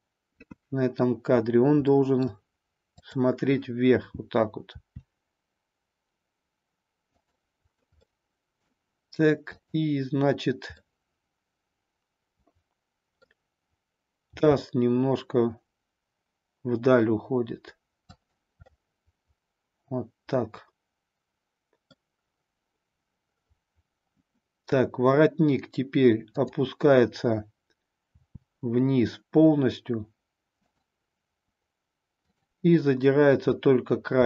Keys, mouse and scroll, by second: 1.9-2.5 middle drag, 4.7 r, 7.1 click, 8.0 middle click, 9.6-10.8 drag, 10.9-13.2 middle drag, 14.2 g, 18.3 click, 18.6-22.0 middle drag, 28.1 r, 30.7 click, 34.1 r.